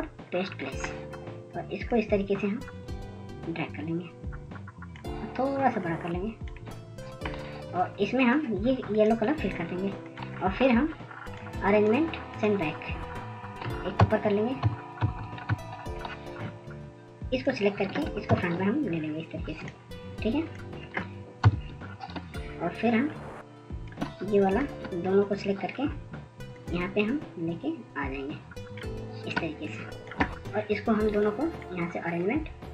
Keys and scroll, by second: 17.4 ctrl+], 18.0 ctrl+], 18.6 ctrl+], 24.9 ctrl+0, 25.5 ctrl+0, 25.9-27.0 ctrl+0, 28.6 ctrl+0.